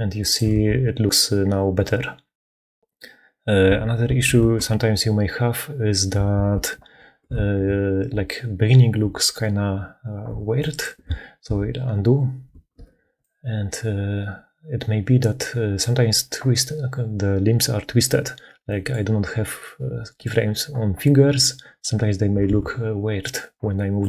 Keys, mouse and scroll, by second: 0.3 shift+space, 3.9 shift+space, 4.3 shift+space, 6.3 shift+space, 7.3 ctrl+z, 7.5 ctrl+z, 11.0 ctrl+z, 11.4 ctrl+z, 12.7 ctrl+z, 13.1-15.7 drag, 19.3 click, 22.4 Tab, 23.9 click.